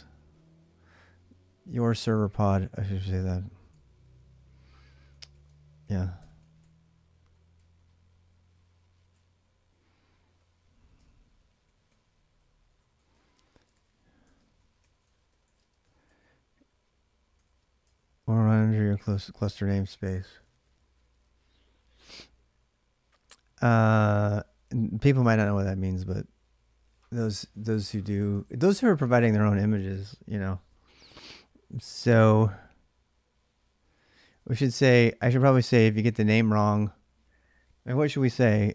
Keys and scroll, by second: 2.1 alt+Tab, 5.1 ctrl+a, 5.6 ctrl+a, 6.0 ctrl+[, 6.1 ctrl+j, 6.2-10.1 typing, 10.8 ctrl+[, 10.8 ctrl+j, 11.2-19.8 typing, 23.7-24.9 typing, 28.0 ctrl+[, 28.2 :, 28.6 Return, 28.6 j, 33.5-35.3 typing.